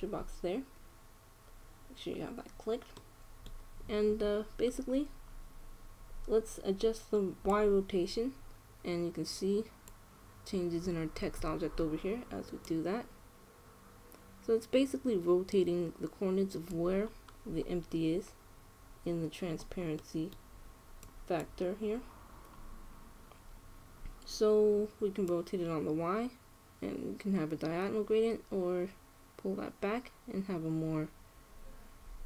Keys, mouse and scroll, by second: 1.0-2.9 middle drag, 3.7-5.7 middle drag, 5.7-6.5 scroll down 1, 6.5 scroll up 1, 6.6-8.2 middle drag, 8.2-9.9 drag, 13.3-15.0 drag, 17.8-20.1 middle drag, 20.7-21.7 middle drag, 21.7-23.4 drag, 23.6-26.0 middle drag, 26.0-27.8 drag.